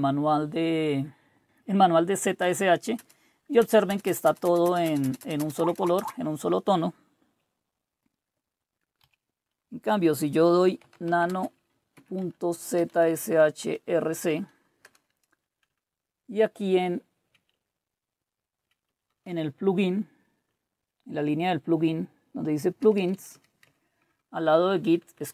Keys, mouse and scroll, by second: 1.4 space, 2.4 space, 3.6-6.0 typing, 9.0 typing, 10.4-13.6 typing, 14.1 Tab, 14.8 Return, 15.7 Down, 16.1 Down, 16.3-17.2 Down, 17.5-18.6 Down, 18.9 Down, 19.1 Down, 19.3 Down, 19.4-20.5 Down, 21.4 Up, 21.9 Up, 22.1-23.1 Up, 23.6 Down, 24.0-24.8 typing.